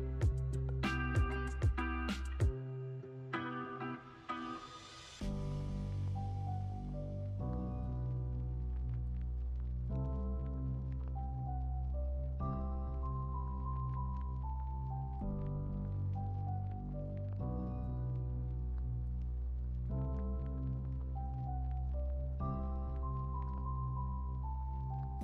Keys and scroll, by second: 0.6 x, 4.8 x, 7.3-8.2 typing, 16.6 x, 18.4 q, 19.8 super+s.